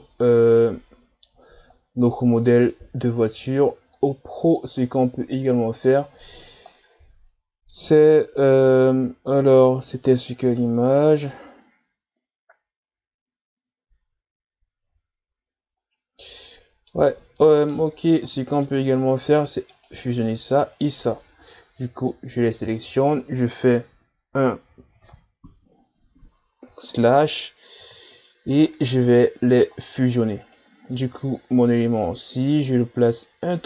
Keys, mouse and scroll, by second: 4.0-6.2 drag, 12.1 scroll up 1, 15.9-16.4 scroll down 1, 16.4-17.1 middle drag, 17.1-17.4 scroll up 1, 17.4-18.0 middle drag, 18.0 shift+scroll down 4, 18.4-18.8 middle drag, 18.8-19.4 scroll up 2, 19.7-21.8 right drag, 21.8 KP_Divide, 26.9-27.3 shift+scroll down 2, 27.3-27.7 scroll up 5, 28.7 shift+scroll down 4, 29.0-29.5 scroll up 5, 29.9 scroll up 2, 30.4-31.0 right drag, 31.0 Tab, 32.1-33.6 drag.